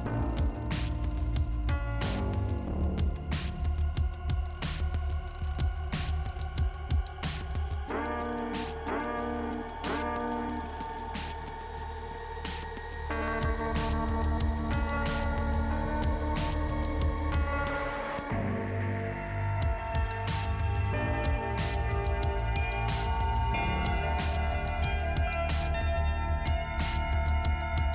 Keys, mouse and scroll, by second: 1.0 click, 1.1 click, 1.4 click, 1.6 click, 1.9 click, 2.0 click, 3.0 click, 3.1 click, 3.9 click, 3.9 click, 4.1 click, 4.4 click, 4.5 double click, 5.0 double click, 5.0 double click, 5.7 click, 5.8 click, 7.6 click, 7.7 click, 8.2 click, 8.2 click, 8.9 click, 9.0 click, 10.1 click, 10.2 click, 10.8 click, 10.9 click, 10.9 click, 11.3 click, 11.4 double click, 12.6 double click, 12.7 double click, 13.5 click, 13.6 click, 13.8 click, 15.0 click, 15.1 click, 15.7 click, 17.4 click, 18.2 click, 18.3 click, 19.2 click, 19.4 click, 19.6 click, 19.8 click, 20.6 click, 20.9 click, 21.8 click, 22.1 click, 23.6 click, 24.3 click, 24.4 click, 25.2-26.1 scroll down 2, 27.3 right click, 27.5 right click.